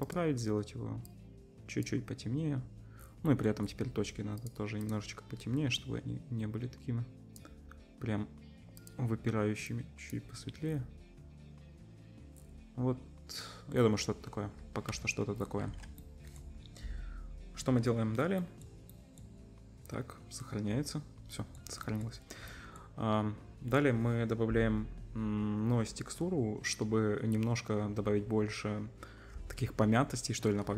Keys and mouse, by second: 0.0 middle click, 0.1-4.4 drag, 4.4 middle click, 4.9-8.8 drag, 8.8 middle click, 8.8-21.9 drag, 14.1 z, 14.9 z, 21.9 middle drag, 22.1-23.9 drag.